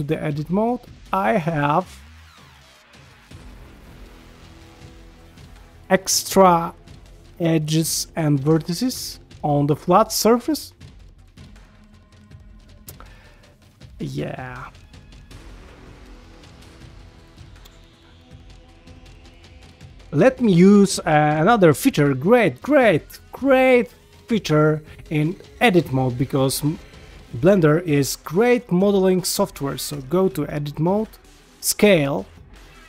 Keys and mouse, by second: 0.3 1, 2.1 click, 3.1 click, 3.6 g, 8.9 ctrl+middle click, 9.2-12.9 middle drag, 13.7 ctrl+Tab, 14.7 g, 18.4 click, 18.8 g, 21.7 shift+middle click, 22.6 shift+a, 24.6 middle click, 26.5 shift+middle click, 28.3 ctrl+middle click, 28.8 shift+middle click, 29.2 ctrl+middle click, 29.9 Tab, 30.3 middle click, 31.5 s.